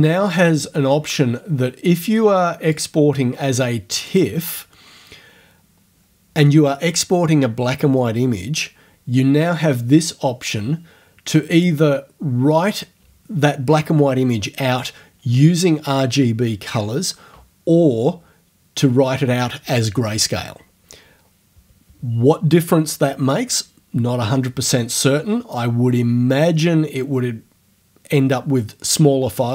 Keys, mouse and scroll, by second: 0.3 click, 2.8 click, 4.1 click, 11.6 click.